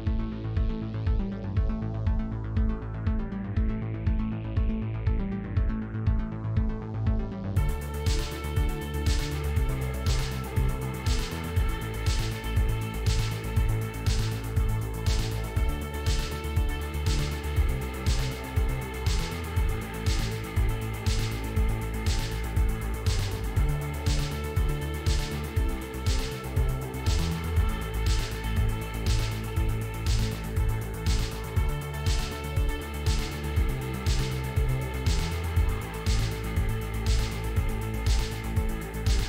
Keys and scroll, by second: 16.0 s, 33.9 f.